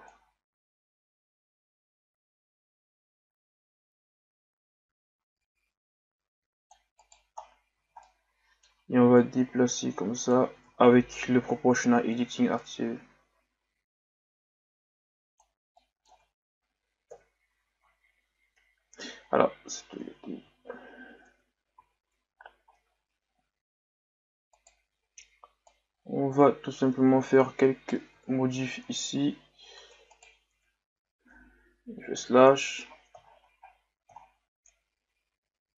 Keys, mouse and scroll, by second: 7.4-7.8 scroll down 2, 7.8 z, 8.0-9.2 middle drag, 9.2-10.6 drag, 10.6 ctrl+z, 11.5 o, 13.0-15.7 drag, 15.7 middle click, 16.1 Tab, 17.1 KP_1, 18.0-18.4 scroll down 2, 19.6 ctrl+z, 19.9 ctrl+z, 21.3 Tab, 22.2 scroll up 1, 22.9-23.3 scroll down 3, 23.3-23.8 scroll up 2, 24.5 right click, 25.7 right click, 29.8 Tab, 30.1 right click, 31.9 KP_Divide, 32.9 scroll up 2, 34.2 scroll down 2, 34.9 scroll up 2.